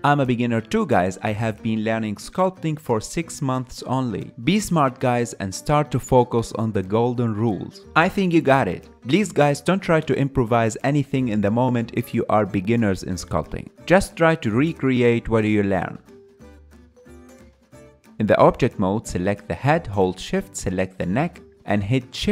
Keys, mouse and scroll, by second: 0.0 g, 0.9 KP_Decimal, 1.0 ctrl+middle click, 1.2 g, 2.2 KP_3, 2.6 click, 3.2-3.9 middle drag, 3.9 KP_1, 4.1 ctrl+a, 4.6-5.9 drag, 5.9 ctrl+Tab, 6.7 ctrl+middle click, 7.0 click, 7.8 ctrl+middle click, 8.0 click, 8.5 KP_3, 8.7 ctrl+shift+middle click, 9.0-10.1 drag, 10.1 middle click, 10.3 click, 10.9 middle click, 11.1 click, 11.4 middle click, 11.9 KP_1, 12.2-13.3 drag, 13.3 middle click, 13.6 KP_3, 13.9 click, 14.2 ctrl+middle click, 14.5 click, 15.4 middle click, 15.6 shift+click, 16.0 f, 16.2-17.3 drag, 17.3 middle click, 17.6 click, 17.7 shift+middle drag, 17.9-19.7 drag.